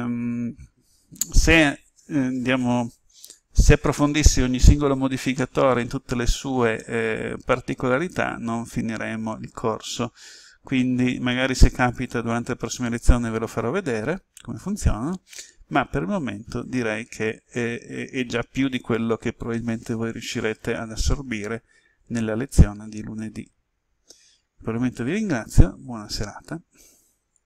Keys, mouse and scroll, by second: 6.8-23.8 middle drag.